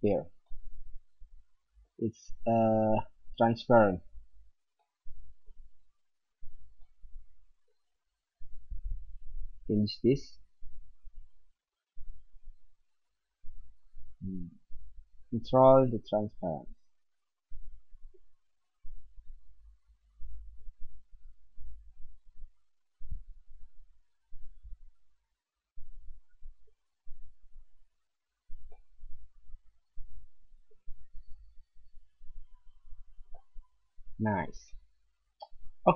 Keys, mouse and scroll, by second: 2.5 middle click, 2.7 middle click, 6.8 middle click, 7.1 middle click, 10.3-13.8 drag, 19.1-23.0 drag, 27.2-28.6 middle drag, 29.7-30.0 middle drag, 30.1 middle click, 33.3-33.7 middle drag, 35.7 click.